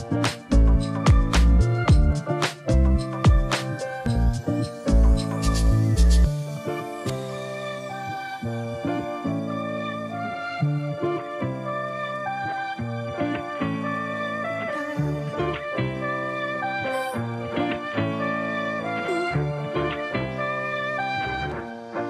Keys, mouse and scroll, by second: 1.7 shift+click, 3.7 ctrl+shift+g, 6.8 shift+click, 10.0 shift+1, 11.1 shift+9, 12.9 shift+click, 14.7 shift+1, 15.8 shift+9, 16.3 shift+0, 18.1 click.